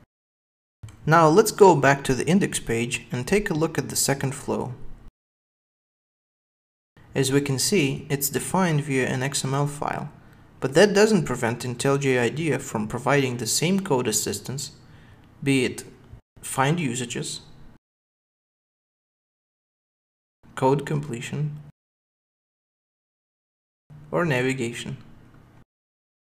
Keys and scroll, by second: 1.0 ctrl+Tab, 3.4 ctrl+Tab, 16.1 alt+super+F7, 19.8 super+w, 21.3 ctrl+space, 21.9 Escape.